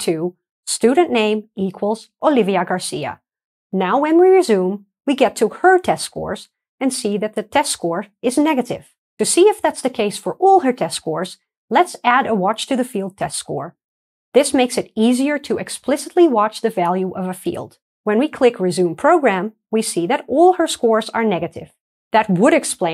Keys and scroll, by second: 1.2 Return, 2.8 super+v, 4.2 ctrl+d, 4.2 shift+F9, 19.4 alt+super+r, 19.4 F9, 20.4 alt+super+r, 21.2 alt+super+r.